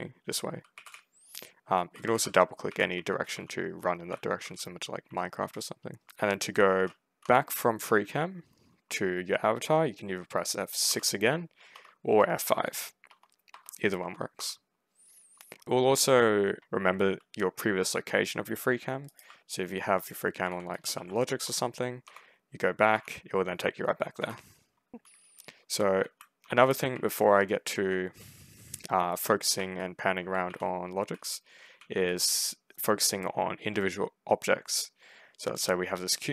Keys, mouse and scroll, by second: 0.0-6.5 typing, 7.1 F6, 10.7 F6, 11.6 F6, 12.0 F5, 13.4 F5, 13.9 F5, 14.2 F6, 18.9 ctrl+right click, 19.1 ctrl+w, 19.5 d, 20.3 w, 20.6 ctrl+space, 20.8 ctrl+w, 21.9 F6, 22.8 F6, 24.0 F5, 24.6-27.7 typing, 26.1 right click, 28.9-32.3 typing, 35.9-36.3 typing.